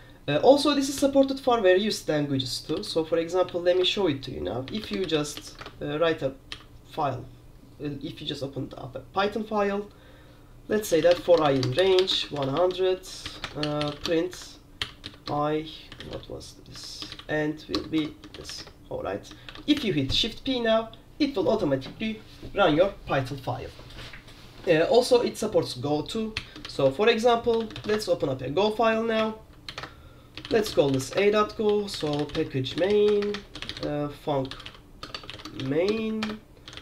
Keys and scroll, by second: 2.9-6.6 typing, 3.9 Return, 10.8-20.1 typing, 26.2-36.8 typing, 29.3 Return.